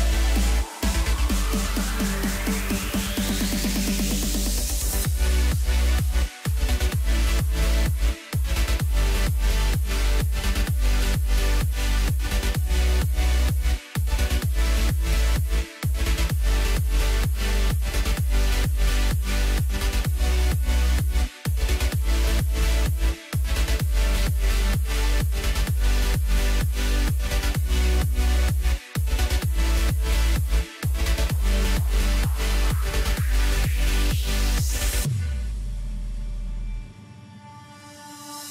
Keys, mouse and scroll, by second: 0.0 click, 4.7-7.1 drag, 7.1-7.5 scroll up 1, 7.5 click, 8.7 click, 9.2 scroll down 2, 9.4 middle click, 10.2 Tab, 10.5 scroll down 3, 10.8 middle click, 11.5 KP_1, 11.9 click, 13.1 click, 14.4-17.5 drag, 18.4 click, 19.4 s, 20.5 g, 21.9 s, 22.8-23.3 middle drag, 23.3-23.6 scroll up 1, 23.6 click, 24.1 scroll up 1, 24.8 scroll up 1, 25.3 click, 26.7 click, 27.8-29.3 drag, 33.0-34.2 drag, 34.2-35.3 scroll down 4, 35.3-36.2 scroll down 1, 36.2-38.0 drag, 38.0-38.5 scroll down 3.